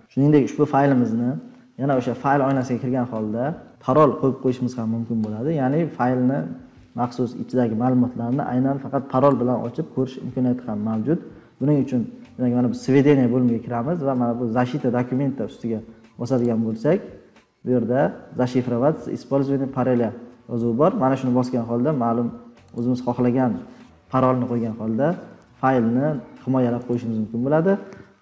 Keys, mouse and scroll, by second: 0.8 click, 2.6-4.5 drag, 27.8-28.2 drag.